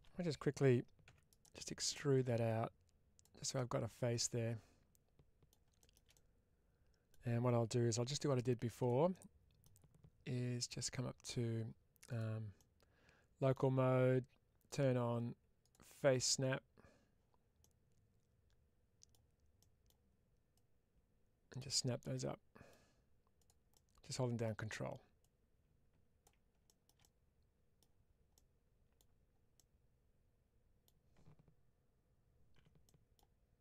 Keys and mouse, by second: 0.9 e, 1.2 right click, 1.8-3.1 drag, 3.4-5.3 middle drag, 6.0 middle click, 8.0 1, 8.7 click, 9.0 middle click, 10.5-12.4 drag, 17.5-19.7 middle drag, 20.4-21.5 drag, 22.0 middle click, 23.6 middle click, 25.1-26.1 drag, 28.2 middle click, 29.4-30.7 middle drag, 32.4 2, 32.7 middle click.